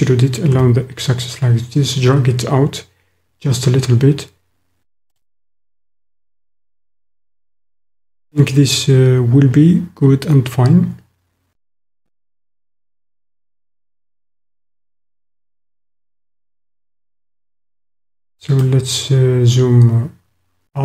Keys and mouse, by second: 0.5 x, 5.9 click, 8.2 click, 12.8-15.1 drag, 17.8 click, 18.8 middle click.